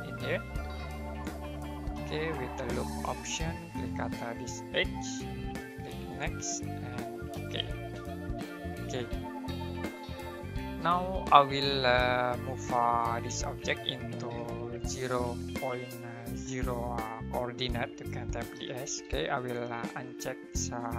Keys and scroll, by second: 7.3 space, 7.9 space, 18.1-19.0 typing.